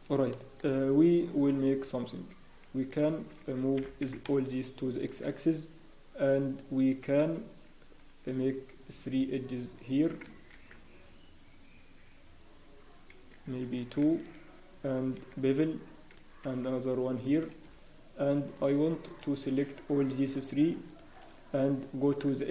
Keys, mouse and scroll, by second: 0.3 shift+middle click, 0.3-0.8 scroll down 2, 0.7 scroll, 2.9 shift+middle click, 2.9 scroll down 1, 3.7 g, 7.9-8.3 scroll, 15.2 ctrl+r, 17.6-18.2 scroll, 18.5 click, 18.5 scroll up 1, 18.8 shift+click, 20.6 click, 22.4 click.